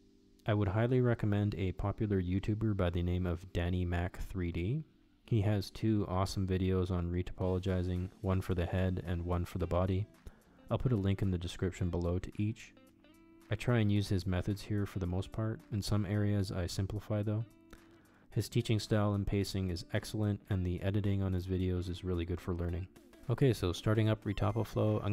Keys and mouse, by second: 20.5-25.1 drag.